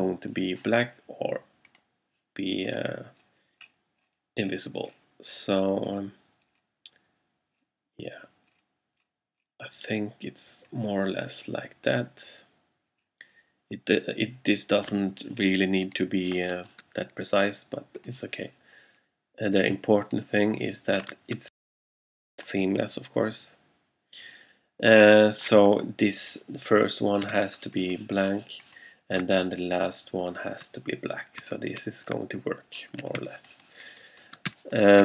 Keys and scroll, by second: 27.5 alt+space, 28.4 space, 33.2 alt+space, 34.2 space, 34.5 space.